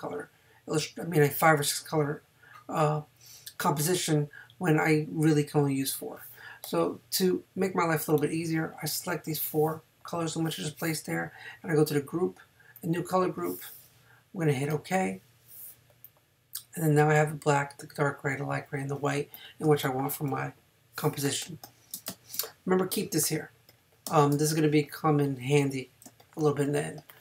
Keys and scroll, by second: 19.6 space, 21.5 space, 24.1 space, 26.1 space.